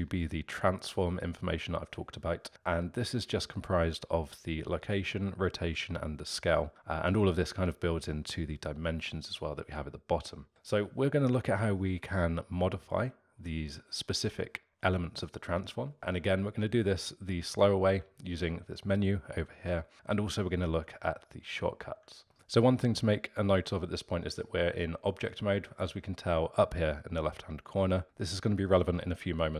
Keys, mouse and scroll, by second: 22.3 alt+middle click.